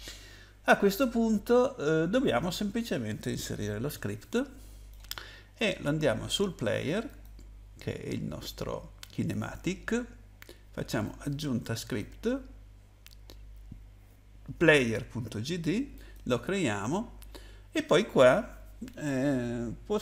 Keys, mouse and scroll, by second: 7.1 click, 11.0 click, 15.9 click.